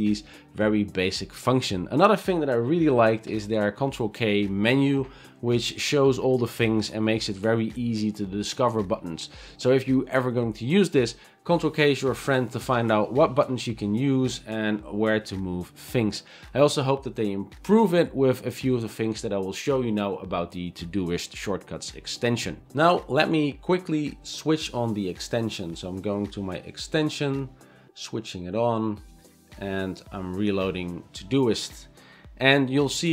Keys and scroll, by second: 3.3 ctrl+k, 13.1 v.